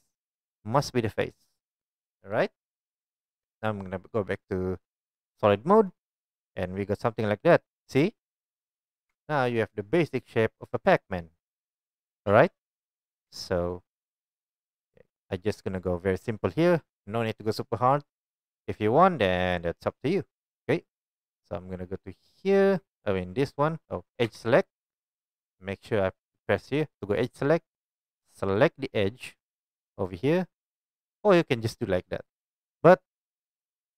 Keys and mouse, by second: 5.3-22.5 drag, 9.1 Tab, 13.3 Tab, 22.5-25.2 middle drag, 24.2 2, 25.2 click, 25.3-33.9 middle drag.